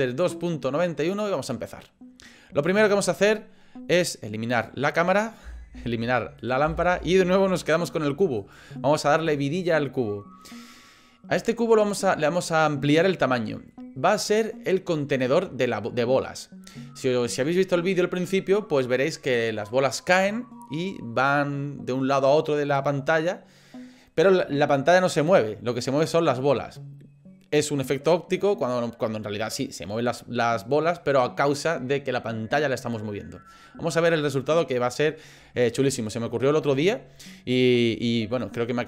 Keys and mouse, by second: 5.4 Delete, 6.6 Delete, 13.3 middle click.